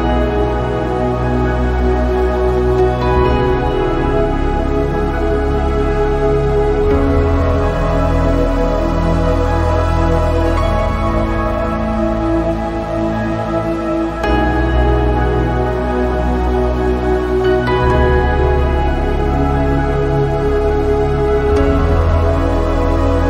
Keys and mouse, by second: 0.3-1.8 drag, 5.5-7.3 middle drag, 7.9-9.2 middle drag, 9.9 middle click, 10.8-12.2 drag, 13.0 middle click, 15.0-17.3 drag, 19.9 ctrl+z.